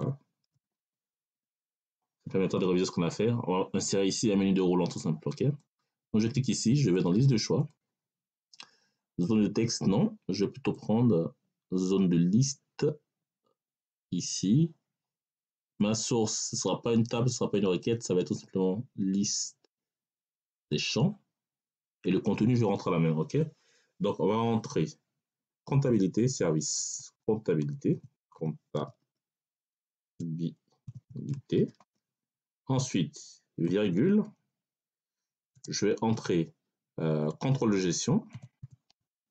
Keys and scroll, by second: 0.0-0.7 typing, 1.2 Tab, 26.7 c, 27.8-28.9 typing, 29.9-31.7 typing, 33.5 ,, 35.4 space, 37.4-39.3 typing.